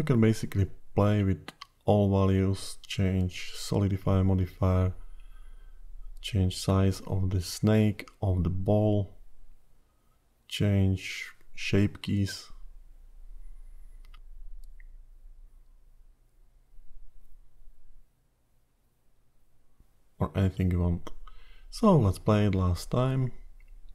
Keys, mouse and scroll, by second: 3.3 ctrl+z, 5.2 click, 6.6-8.0 scroll down 2, 8.0 click, 12.4 click, 15.0 click, 20.5 ctrl+z, 21.9-22.8 scroll down 3.